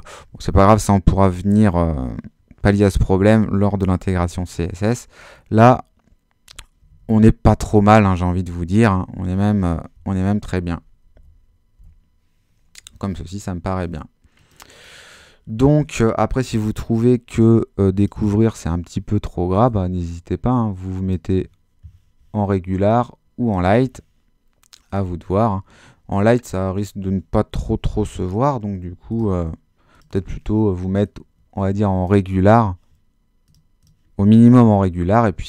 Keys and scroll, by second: 4.2 super+h, 5.6 super+-, 6.9 super+-, 9.9 super+Up, 10.6 Up, 11.8 Up, 27.5 super++, 34.8 super+-.